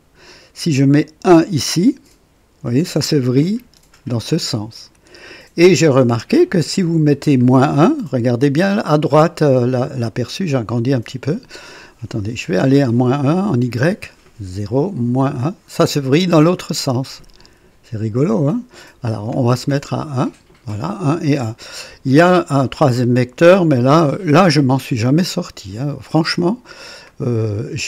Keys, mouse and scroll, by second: 1.0 click, 2.1 scroll up 1, 3.4-5.1 drag, 6.5 click, 10.0-10.3 scroll up 1, 10.7 right click, 12.4 click, 14.1 scroll down 2, 14.9 scroll down 2, 16.9-18.6 drag, 19.1 click, 19.8-20.1 scroll up 2, 23.5 click, 24.3-24.6 scroll up 1, 25.3-25.9 scroll down 1, 26.1-26.8 scroll up 3, 27.1-27.7 scroll down 4.